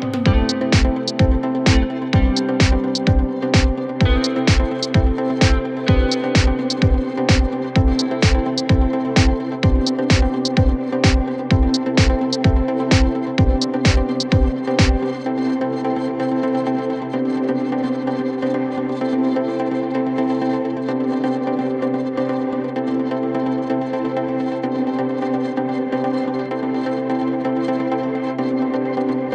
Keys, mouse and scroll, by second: 0.9 click, 10.3 click, 12.1-16.6 drag, 16.6 space, 16.8 click, 17.0-17.5 space, 17.5 space, 18.1-21.7 drag, 23.0 shift+click, 24.7 ctrl+t, 25.7-27.7 drag, 28.0 alt+scroll down 1.